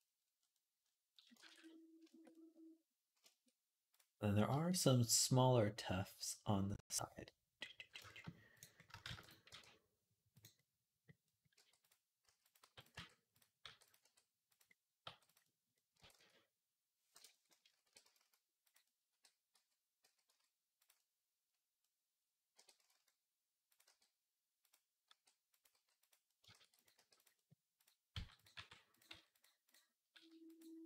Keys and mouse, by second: 0.0 click, 0.2 click, 0.5 click, 0.9-2.0 ctrl+drag, 1.3 ctrl+s, 2.0-7.9 middle drag, 8.9 shift+d, 9.3 r, 10.4 middle click, 10.6 click, 10.8 middle click, 11.3-13.8 typing, 13.4-16.0 drag, 14.8 g, 15.8 r, 17.6 r, 18.9-21.2 drag, 18.9 g, 22.4 r, 23.6 g, 24.9 r, 25.5 g, 26.3 shift+d, 26.7 r, 27.9 g, 28.3 r, 28.9 s, 29.9 s, 30.8 ctrl+z.